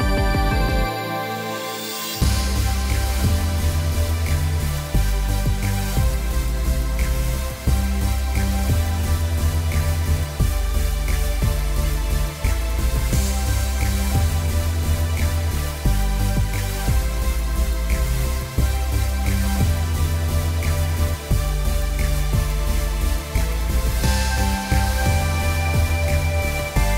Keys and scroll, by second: 2.4 s, 3.6 k, 5.5 k, 6.5 k, 10.5 r, 13.2 p, 16.0 7, 16.2 Return, 24.4 r, 26.4 t.